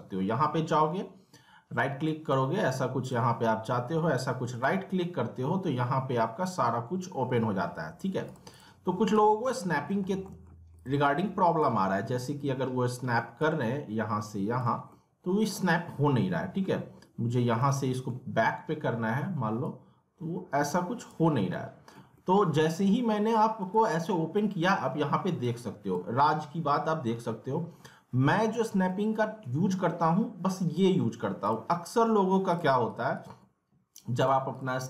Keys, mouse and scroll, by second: 0.3 right click, 2.0 click, 4.5 right click, 8.3 click, 9.1 z, 9.5 alt+middle click, 10.0 scroll down 1, 10.2 alt+middle click, 10.7 click, 11.6 w, 13.4-14.9 drag, 14.9-17.6 alt+middle drag, 17.6-19.6 alt+middle drag, 19.6-21.3 drag, 21.3 scroll down 1, 21.5 alt+middle click, 22.1 scroll up 1, 22.2-23.6 alt+middle drag, 23.6 right click, 25.4-28.3 drag, 31.4-34.8 drag.